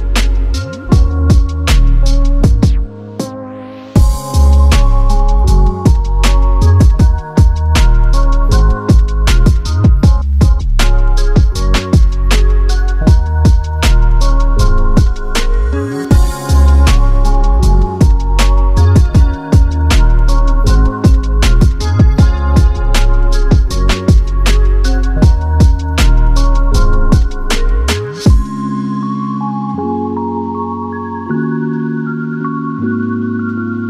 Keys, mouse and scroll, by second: 0.0-5.5 typing, 0.4 Return, 0.6 scroll up 3, 2.2 Return, 2.6 middle click, 2.9 ctrl+z, 4.8 middle click, 5.3 middle click, 5.7 middle click, 6.2 double click, 6.5 double click, 6.6 right click, 6.9 scroll up 5, 7.0 middle click, 7.3 typing, 8.4 double click, 8.5 right click, 8.9 double click, 9.1-9.9 typing, 9.7 Return, 10.1 Escape, 10.5 ctrl+z, 11.5-17.2 typing, 11.9 ctrl+click, 12.1 ctrl+click, 12.3 double click, 12.5 double click, 13.4 Return, 13.6 double click, 14.5 Return, 17.7 middle click, 17.9 scroll down 11, 18.1 middle click, 19.0 middle click, 19.3 scroll up 3, 19.5 right click, 19.7 double click, 20.0 right click, 20.6 middle click, 20.9-21.3 scroll down 4, 21.0 middle click, 21.3-21.8 scroll up 12, 21.4 middle click, 21.8 middle click, 21.9 middle click, 22.2 double click, 22.4 double click, 22.8 double click, 23.1 c, 24.6 p, 25.0 scroll down 5, 25.2 p, 25.4 double click, 26.1 c, 27.5 typing, 27.9 scroll down 9, 28.1 middle click, 28.7 scroll up 11, 29.0 middle click, 29.2 double click, 29.3 scroll up 9, 30.1 scroll down 5, 30.3 |, 30.5 double click, 30.8 double click, 31.1 scroll up 3, 31.9 double click, 32.9 double click, 33.0 right click.